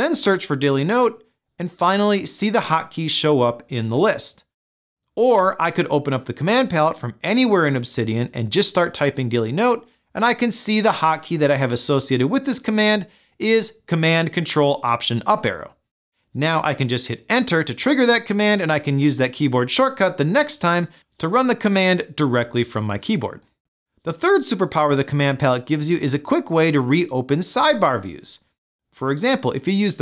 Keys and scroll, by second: 17.8 Return.